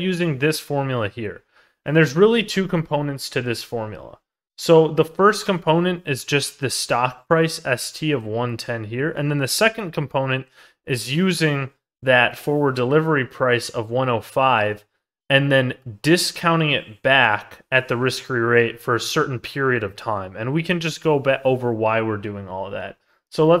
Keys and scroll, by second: 8.9 ctrl+z, 14.5 ctrl+z, 20.4 ctrl+z.